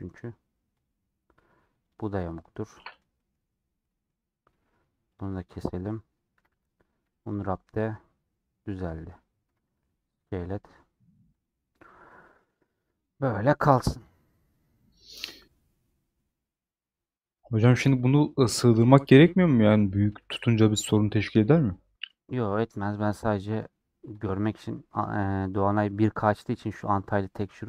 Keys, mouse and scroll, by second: 0.7 click, 1.8 click, 2.7 middle click, 3.5 scroll up 1, 3.7-5.0 middle drag, 5.0 click, 5.8 middle click, 6.4 a, 7.6-9.6 middle drag, 9.6 s.